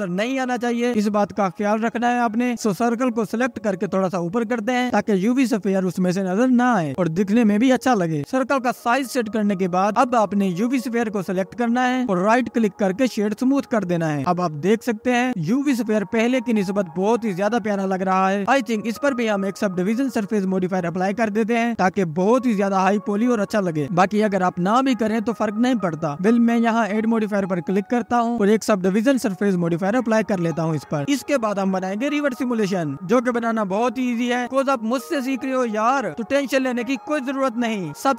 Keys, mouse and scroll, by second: 0.0 click, 0.8-2.6 scroll up 1, 2.6-3.0 scroll down 4, 4.0-7.4 drag, 12.1 ctrl+s, 12.9-15.8 right drag, 15.8-17.5 scroll up 2, 17.7-18.1 scroll down 1, 23.1 click, 24.7 click.